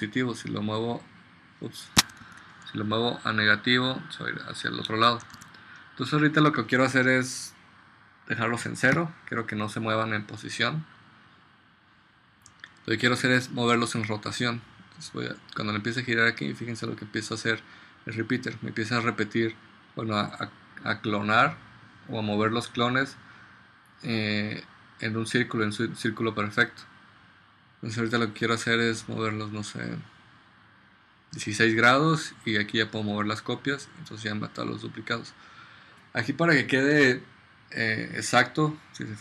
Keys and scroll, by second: 2.4 super+z, 5.4 super+z, 9.0 0.